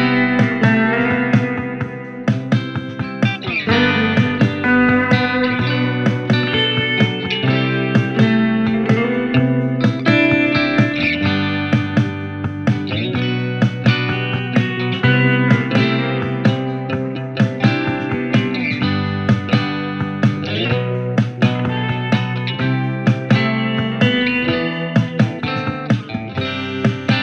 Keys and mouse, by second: 2.7-3.2 drag, 7.5-8.7 drag, 8.7-27.2 alt+middle drag.